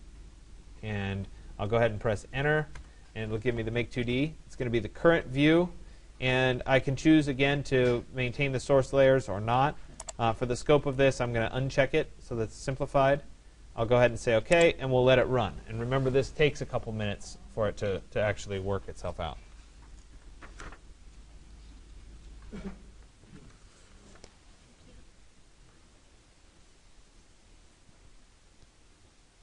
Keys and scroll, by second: 2.4 Return.